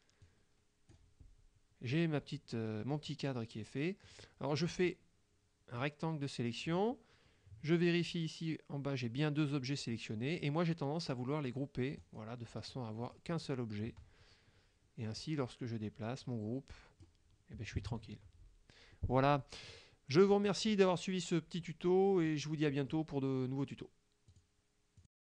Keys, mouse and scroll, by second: 0.3 click, 3.1-4.3 drag, 4.7-6.1 drag, 12.1 click, 12.7 click, 13.1 click, 15.3-17.3 drag, 18.0 ctrl+z, 19.8 click, 22.4 click, 24.4 click, 25.1 click.